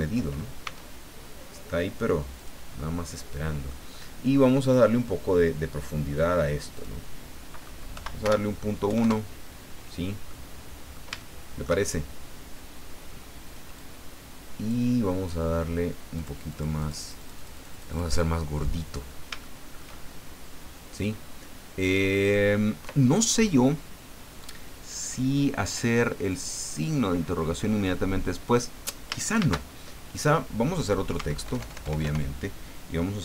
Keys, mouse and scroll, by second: 0.6 s, 2.4 click, 2.9 middle click, 4.6 click, 6.7 click, 7.9 End, 8.3 BackSpace, 8.9 KP_1, 9.0 KP_Enter, 10.3-11.8 drag, 12.1 shift+scroll up 2, 13.8-14.9 drag, 16.2 click, 16.5-18.2 drag, 18.4 middle click, 19.1 scroll up 2, 19.4 shift+click, 22.2 scroll down 2, 28.4 click, 29.4 shift+a, 30.1 click, 31.1 Tab, 31.4 BackSpace.